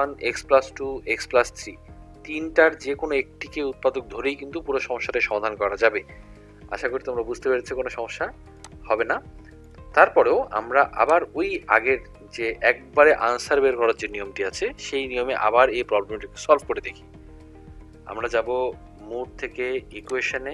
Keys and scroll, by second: 9.7 1, 20.1 5.